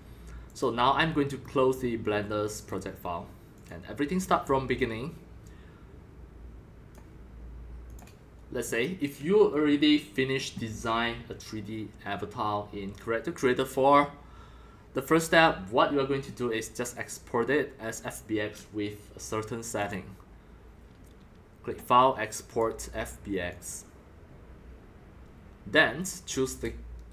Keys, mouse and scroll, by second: 0.4-2.4 drag, 2.5 click, 3.5 click, 4.7-6.9 drag, 7.8 click, 8.0-11.3 drag, 11.9 click, 12.3-13.0 drag, 14.4 click, 15.0 right click, 19.8-27.1 drag.